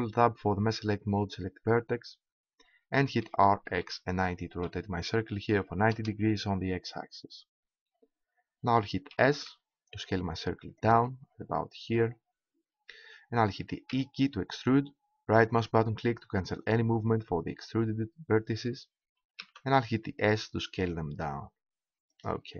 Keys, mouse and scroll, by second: 3.2 r, 6.0 click, 9.1 s, 10.9-12.6 drag, 13.9 e, 15.4-17.1 right drag, 17.3 right click, 19.3 s.